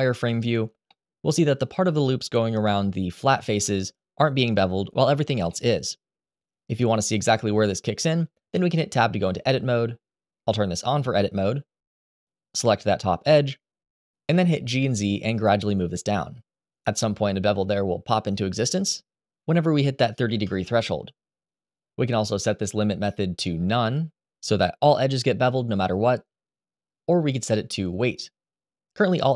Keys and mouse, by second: 0.0 click, 4.7-5.2 middle drag, 5.2-5.8 middle drag, 8.2 Tab, 10.5 click, 12.0 click, 13.8 g, 14.1 z, 22.2-23.7 drag, 26.5-27.9 drag.